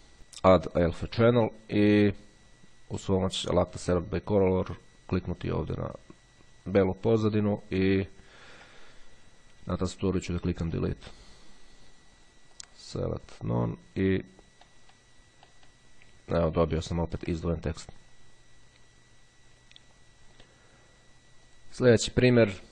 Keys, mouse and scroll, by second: 1.0 click, 3.7 click, 5.5 click, 7.4-9.8 ctrl+scroll up 2, 10.9 Delete, 12.6 click, 13.8 click, 15.1-16.4 middle drag, 16.4-17.2 ctrl+scroll down 1, 17.2-18.0 ctrl+scroll down 1, 18.0-18.3 scroll down 1, 19.8-21.1 drag, 21.5 click.